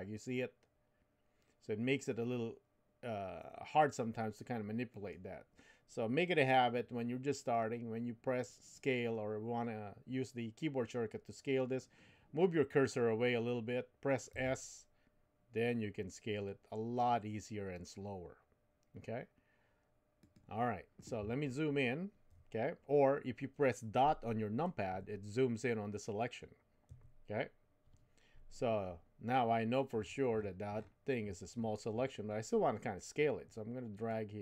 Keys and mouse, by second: 14.3 s, 24.9 KP_Decimal, 26.9 KP_Decimal, 34.1-34.4 drag.